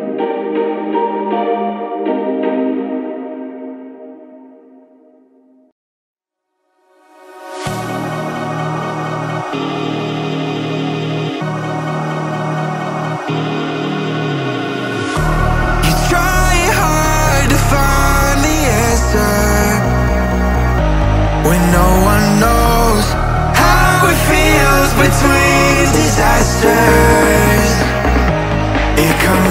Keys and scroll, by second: 1.9 Return, 3.3 ctrl+[, 5.5 ctrl+], 7.8 ctrl+].